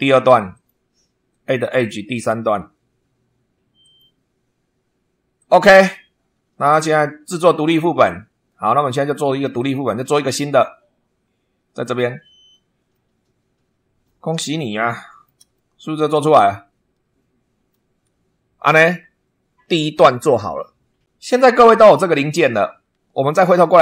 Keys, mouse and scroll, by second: 0.5 click, 2.1 click, 3.8 click, 5.3 click, 9.5 click, 12.9-14.2 middle drag, 14.8 shift+middle click, 15.5-17.3 shift+middle drag, 17.3 click, 21.1 click.